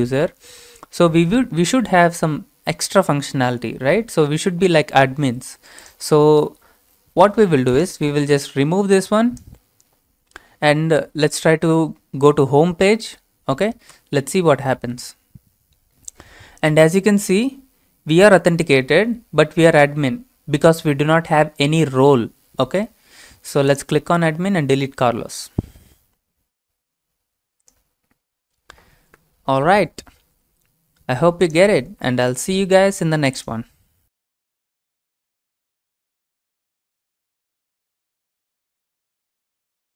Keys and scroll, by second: 14.9 Return.